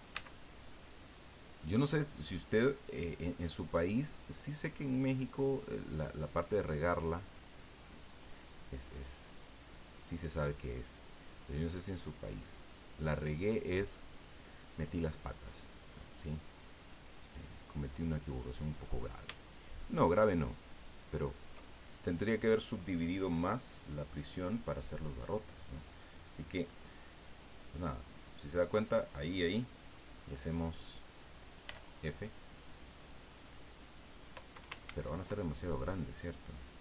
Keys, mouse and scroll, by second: 0.1 w, 0.7 click, 3.4 click, 10.1 click, 11.8-13.8 middle drag, 17.2 click, 18.6 right click, 20.7 shift+right click, 31.6 f, 34.8 ctrl+z.